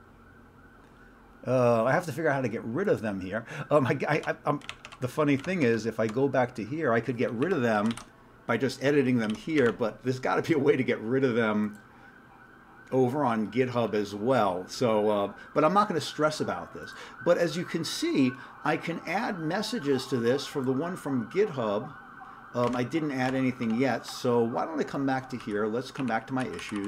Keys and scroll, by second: 4.2 alt+Tab, 4.6 alt+Tab, 4.8 alt+Tab, 5.4 alt+Tab, 7.3 Up, 7.4 Up, 7.8 ctrl+c, 7.9 ctrl+e, 9.3 ctrl+g, 9.6 alt+Tab, 22.8 alt+Tab, 23.3 alt+Tab, 23.6 alt+Tab, 25.4 q, 26.0 Up, 26.4 Down, 26.6 Down, 26.8 Down.